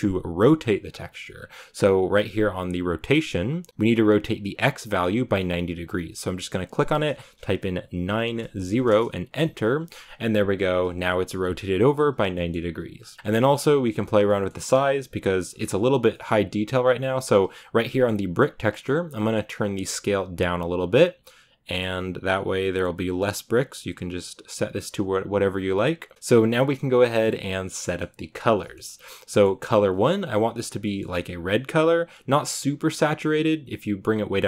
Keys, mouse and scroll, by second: 4.3 click, 9.2 click, 12.2-18.3 shift+middle drag, 18.3-22.5 drag, 26.1-30.4 drag, 30.7-32.4 middle drag, 32.4 click.